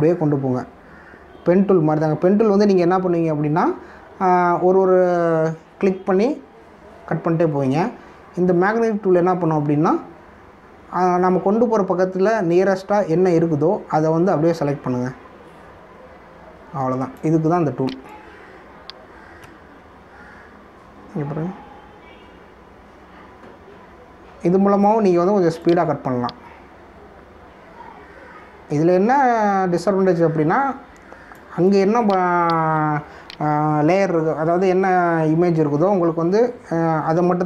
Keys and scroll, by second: 18.8 space, 32.3 space.